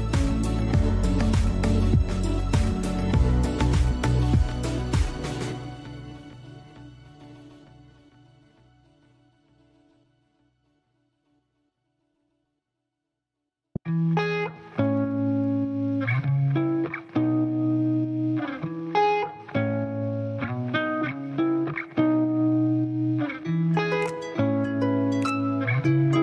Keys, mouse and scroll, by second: 6.3 space, 6.6 click, 6.8 space, 7.8-10.3 alt+right drag, 10.3-13.9 drag, 13.9 scroll up 1, 15.8 ctrl+space, 16.9 space, 17.7-21.2 drag, 21.2 alt+right click, 21.7 space, 21.8 click, 22.0 space, 22.5-23.8 drag, 23.8 space, 24.0 click, 24.1 space, 26.0 alt+right click.